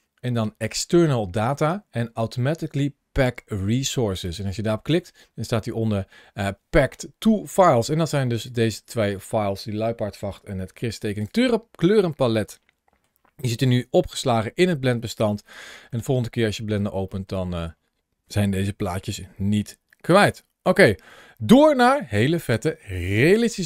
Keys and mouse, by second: 8.3-11.0 drag, 12.3-12.8 middle drag, 15.3 shift+middle click, 15.8-16.6 middle drag, 17.0 shift+middle click, 19.7 shift+middle click, 20.2 middle click, 20.7 shift+middle click.